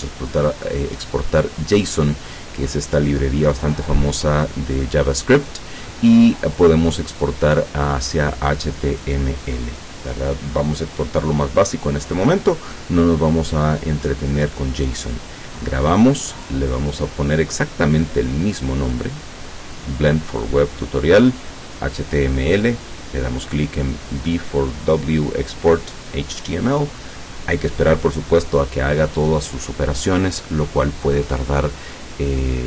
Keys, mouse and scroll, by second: 14.9 click, 22.6 click.